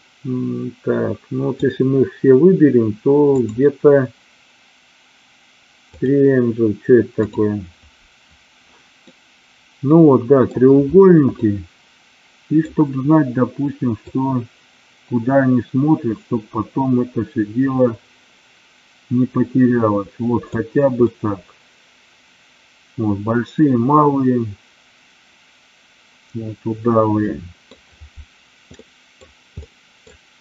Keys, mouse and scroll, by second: 3.5-6.1 drag, 7.2 click, 9.1-10.6 middle drag, 11.3-12.5 middle drag, 14.1-20.5 drag, 21.0-27.7 middle drag, 28.8 middle click, 29.6-30.0 middle drag, 30.3 KP_1.